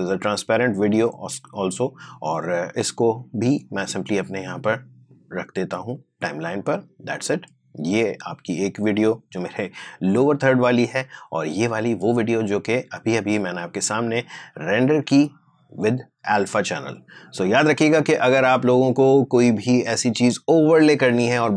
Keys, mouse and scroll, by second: 2.8-10.3 drag, 11.6 click, 13.4 space.